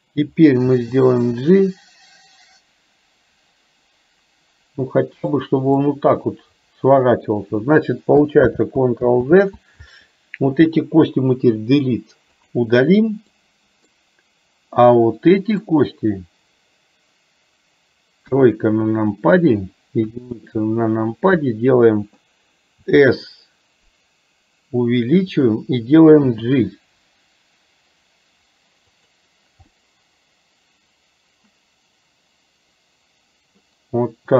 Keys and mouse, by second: 5.9-7.4 middle drag, 8.4 ctrl+z, 11.7 Delete, 13.4 middle click, 14.9 middle click, 18.3 KP_1, 22.9 s, 29.8-33.7 middle drag.